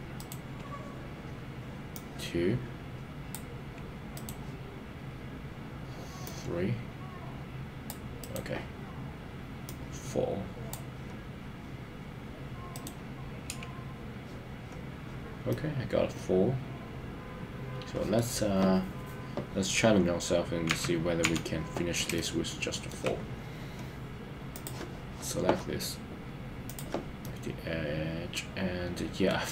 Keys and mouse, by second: 15.5-18.2 middle drag, 20.8 KP_1, 21.2 KP_3, 22.1 shift+middle click, 27.2-29.5 middle drag.